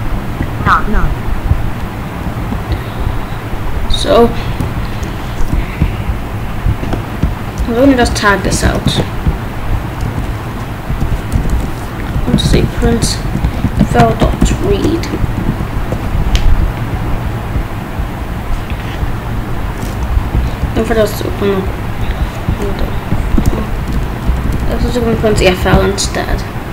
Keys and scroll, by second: 8.0 /, 8.4 BackSpace, 8.6 ctrl+/, 8.9 ctrl+s, 10.0 Return, 10.9-14.7 typing, 15.4 ctrl+s, 20.0 Up, 20.6 Return, 23.3 ctrl+s, 23.7 BackSpace, 25.2 ctrl+s, 25.4 ctrl+b.